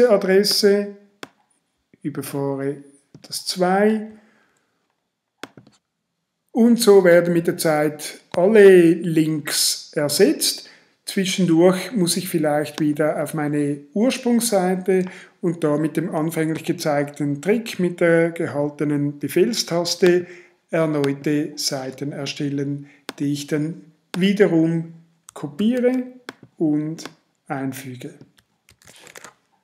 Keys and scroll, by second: 3.9 super+v, 25.6 super+c, 28.7 super+v, 29.2 shift+super+v.